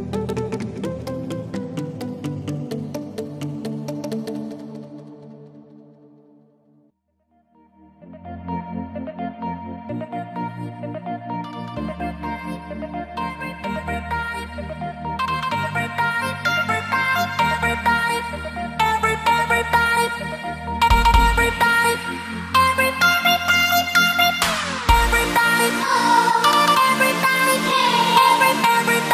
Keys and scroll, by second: 1.8 x, 7.4 typing, 8.8-9.2 typing.